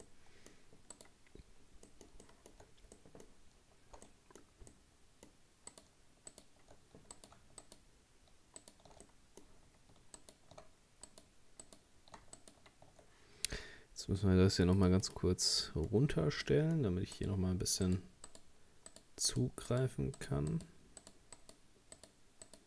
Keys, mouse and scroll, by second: 0.1 middle click, 1.0 right click, 1.5-1.9 scroll up 2, 1.9 middle click, 2.6-3.0 shift+scroll up 1, 3.0-5.7 middle drag, 5.7 right click, 6.3 shift+right click, 7.2 right click, 7.6 alt+shift+right click, 8.6 alt+shift+right click, 9.1-10.2 middle drag, 10.2 alt+shift+right click, 11.1 shift+right click, 11.7 shift+right click, 12.4 alt+shift+right click, 14.6-15.6 drag, 15.6-17.2 middle drag, 17.2 right click, 17.9 shift+right click, 18.3 shift+right click, 18.9 shift+right click, 19.3 shift+right click, 19.7 shift+right click, 20.2 shift+right click, 20.5 shift+right click, 21.0 shift+right click, 21.4 shift+right click, 22.0 shift+right click, 22.5 shift+right click.